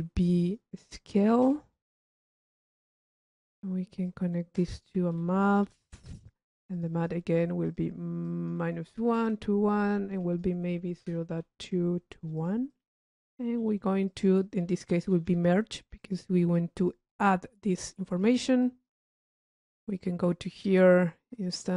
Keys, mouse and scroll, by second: 2.7 click, 4.2 click, 5.5-7.6 drag, 7.8 click, 8.4 click, 10.3 click, 11.6 middle click, 12.6 click, 13.8 right click, 14.3 click, 16.2 click, 20.1 click, 21.5 click.